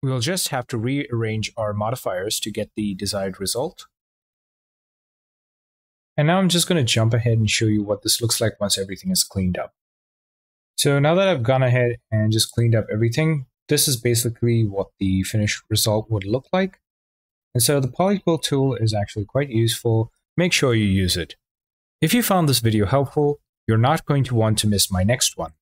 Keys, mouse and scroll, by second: 0.6-1.7 drag, 3.1-4.3 drag.